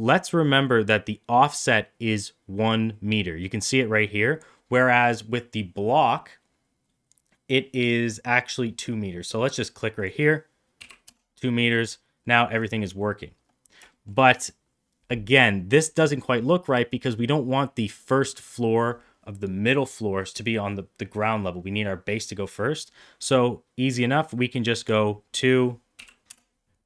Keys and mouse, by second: 9.8-11.7 drag, 12.1 middle click, 12.9 middle click, 13.8 shift+middle click, 14.0 middle click, 24.9-26.8 drag.